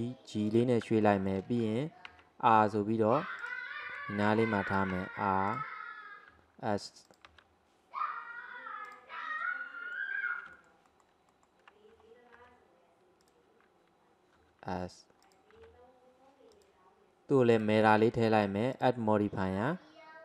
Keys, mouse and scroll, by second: 1.1-2.2 shift+middle drag, 2.2 r, 4.0 g, 5.0 r, 6.4 s, 7.4 g, 9.4-10.6 middle drag, 11.4 alt+middle click, 12.4 g, 14.4 s, 15.6 g, 17.6-18.8 drag.